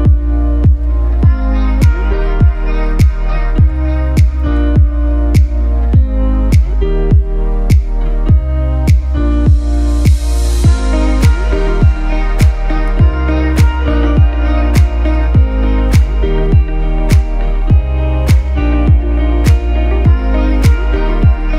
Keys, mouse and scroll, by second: 1.1 shift+click, 1.1 shift+space, 1.6 click, 4.3 shift+click, 5.3 shift+click, 11.5-11.9 scroll down 1, 11.9-12.7 typing, 12.5 click, 12.8 click, 14.0 right click, 15.1 click, 15.9-20.5 shift+drag.